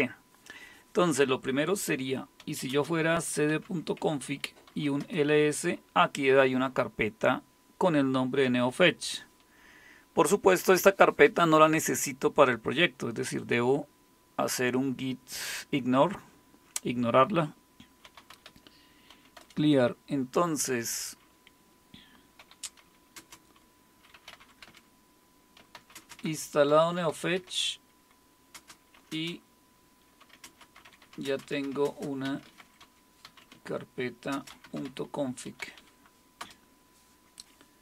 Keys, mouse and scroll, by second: 2.2-5.4 typing, 17.8-19.1 typing, 19.4 Return, 22.2-36.4 typing.